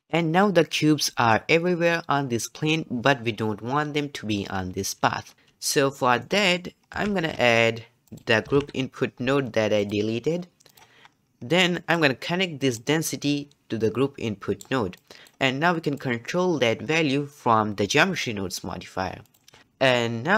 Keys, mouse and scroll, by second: 6.2-7.1 middle drag, 7.1 shift+a, 11.1-11.7 scroll up 4, 11.7-12.7 middle drag, 12.7-19.0 drag, 19.6 click.